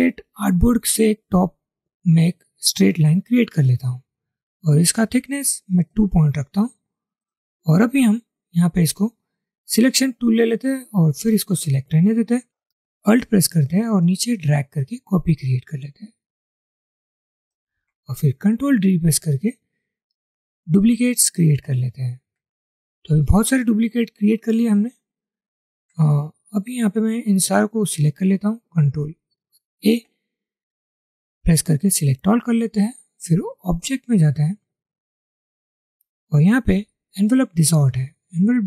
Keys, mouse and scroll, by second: 13.7 alt+click, 18.9 ctrl+d, 22.1 ctrl+d, 23.1 alt+scroll down 1, 24.9 ctrl+d, 25.2 ctrl+d.